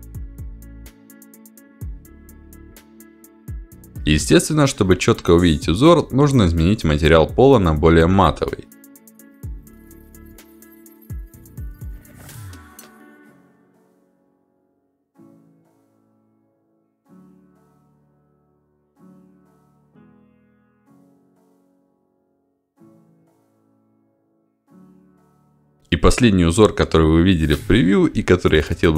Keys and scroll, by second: 0.8 1, 1.7 0, 2.5 Return, 10.9 s.